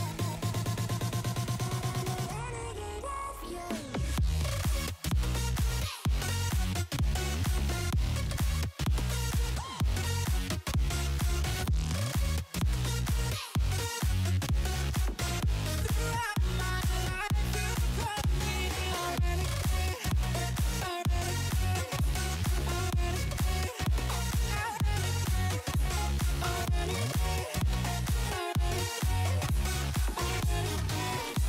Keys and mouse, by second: 0.8 alt+shift+click, 2.7 Return, 6.0 click, 8.8 click, 9.9 click, 10.5 space, 10.7 click, 11.3 x, 13.8 click, 14.9 click, 16.5 space, 16.5 click, 17.9 click, 18.6 click, 20.8 click, 21.7 click, 23.5 click, 25.3 click, 27.2 shift+click, 28.3 Down, 28.9 Down, 29.2 Up, 29.7 Return, 30.3 space, 30.6 click, 31.1 click.